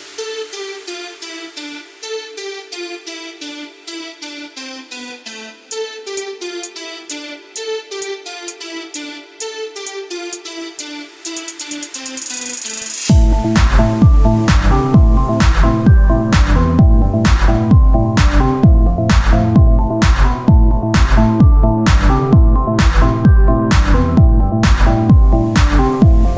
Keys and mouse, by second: 0.9 ctrl+Tab, 3.4 click, 3.8 ctrl+Tab, 5.0 e, 6.3 click, 11.1 click, 14.2 r, 15.5-17.3 drag, 17.3 e, 18.5-23.2 drag, 21.8 Tab, 26.1-26.3 drag.